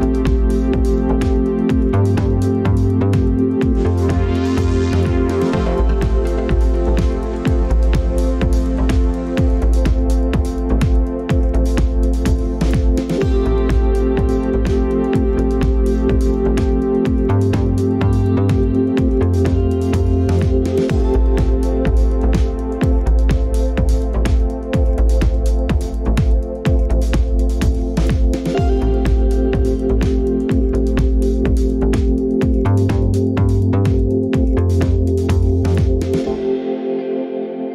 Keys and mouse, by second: 4.3 click, 6.6 shift+y, 8.5 g, 14.0 drag, 19.3 click, 24.9 Tab, 26.2 ctrl+s, 28.1 click, 28.8 click, 29.3 click, 29.8 click, 31.0 Tab, 31.8 Tab.